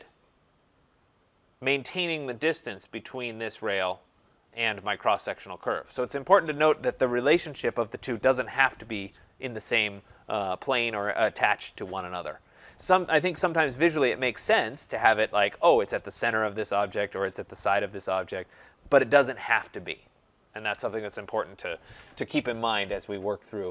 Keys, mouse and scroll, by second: 0.5 click, 23.1 click.